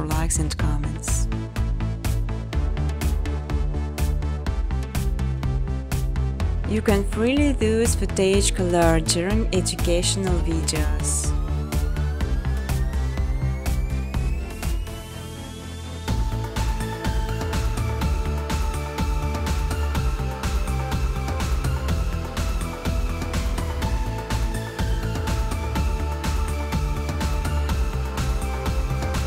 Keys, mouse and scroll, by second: 0.6 Tab, 1.4-1.9 typing, 2.1 Tab, 3.3-6.6 typing, 5.3 Tab, 10.3-12.8 typing, 11.9 Tab, 14.2-15.6 typing, 16.8 Tab, 17.2 Tab, 18.4-20.8 typing, 22.3 alt+click, 22.3-26.6 typing, 25.2 click.